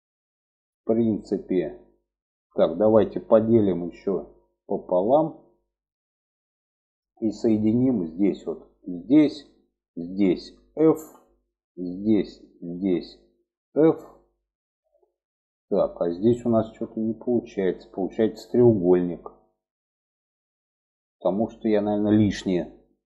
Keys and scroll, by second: 10.3 f, 13.0 f.